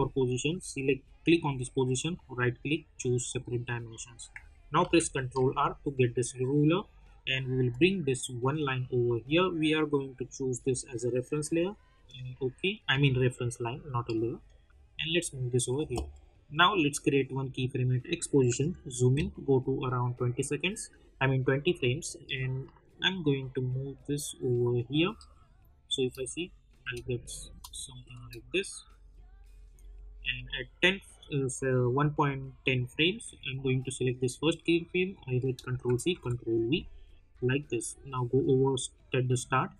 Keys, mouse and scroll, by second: 2.0 right click, 3.2 click, 4.7 ctrl+r, 7.6-14.4 drag, 14.4-16.5 drag, 18.5 =, 20.1-25.6 drag, 22.4-25.6 shift+drag, 25.9 space, 27.1 click, 27.4 space, 29.2-33.2 drag, 35.7 ctrl+c, 36.1 ctrl+v, 37.3-38.7 drag.